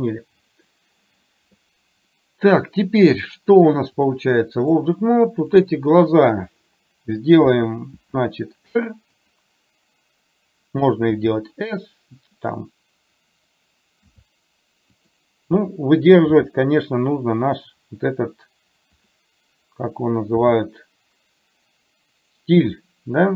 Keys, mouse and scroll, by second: 4.1 click, 8.1 r, 11.1 s, 14.1 s, 16.4 g, 20.4 r.